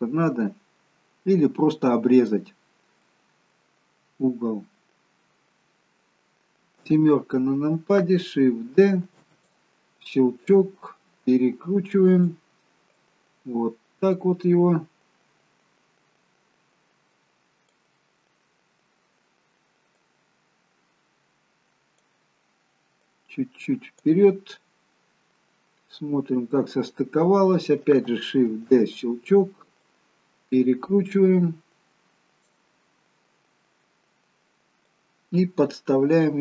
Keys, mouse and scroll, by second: 2.8-3.2 scroll down 2, 3.2 middle click, 4.1-5.9 scroll down 1, 6.9 KP_7, 9.2 shift+d, 10.6 click, 13.1 click, 20.2 click, 26.1-27.1 scroll down 1, 28.6 shift+d, 30.0 click, 35.0 click.